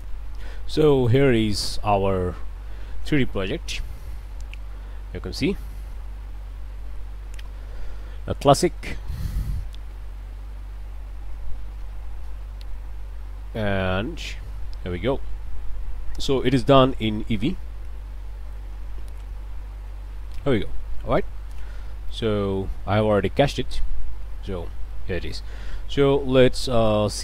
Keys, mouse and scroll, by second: 1.1 click, 1.6 space, 21.3 space, 22.1-27.1 drag.